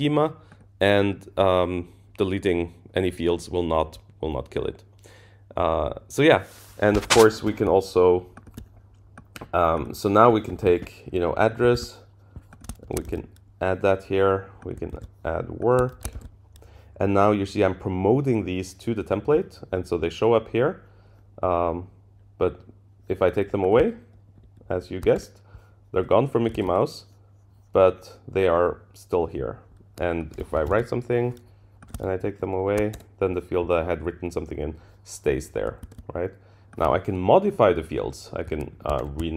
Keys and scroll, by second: 11.7 super+c, 13.0 super+v, 14.9 super+c, 16.1 super+v, 24.3 shift+Down, 25.2 shift+Down, 26.5 super+z, 32.1 shift+Down, 35.8 super+z, 38.7 super+Left, 38.7 Right.